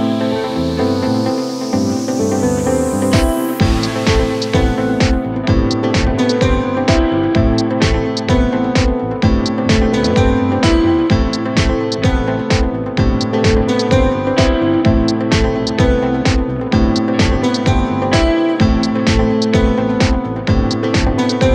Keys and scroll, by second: 13.1 KP_Add, 20.1 ctrl+g.